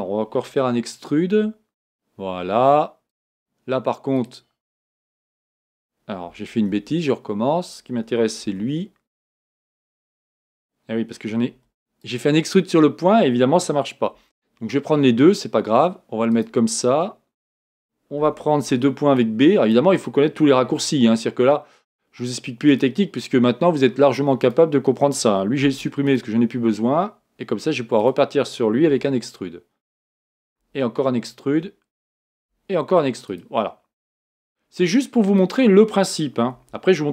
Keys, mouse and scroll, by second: 1.3 scroll up 1, 1.3 e, 4.2 click, 4.7 e, 8.5 g, 11.6 b, 14.2 g, 18.7 b, 22.0 g, 24.4 click, 25.6 x, 28.0 click, 28.9 e, 30.6 e, 35.4 click, 36.6 e.